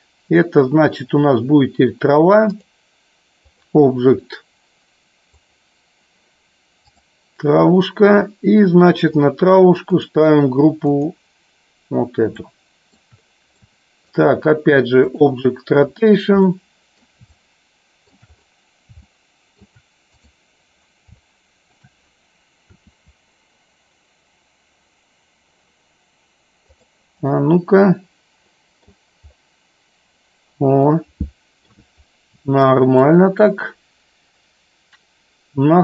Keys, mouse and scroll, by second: 2.4-3.8 drag, 5.4 click, 9.9-11.1 drag, 12.4 shift+middle click, 13.8 shift+middle click, 15.3 click, 16.6-17.1 middle drag, 17.5-18.1 shift+middle drag, 19.0-19.5 shift+middle drag, 20.0 click, 21.3-21.9 shift+middle drag, 26.8 click, 27.3-29.0 middle drag, 30.9 middle click, 32.5 shift+middle click.